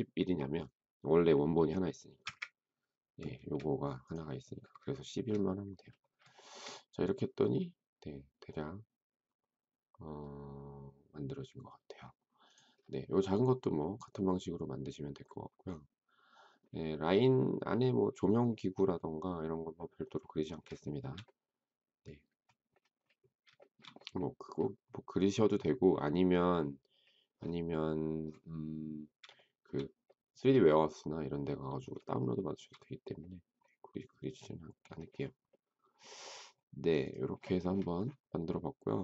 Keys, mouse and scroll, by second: 2.2 Return, 3.3 space, 4.9 shift+middle click, 6.3 shift+middle click, 20.8 shift+middle click, 23.5 shift+middle click, 29.3 shift+middle click, 32.1 shift+middle click.